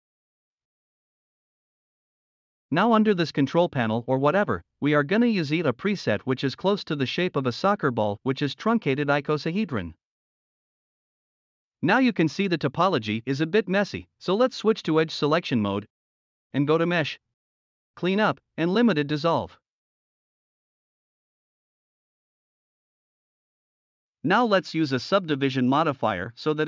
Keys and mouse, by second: 1.0-2.4 middle drag, 9.5 drag, 9.7-10.2 middle drag, 10.4 middle drag, 10.7 middle drag, 10.9 middle click, 11.4 click, 12.0 middle click, 12.2 Tab, 12.3 middle click, 13.0 middle click, 15.6 click, 17.5-20.8 drag, 21.0-21.5 drag, 26.5-26.6 drag.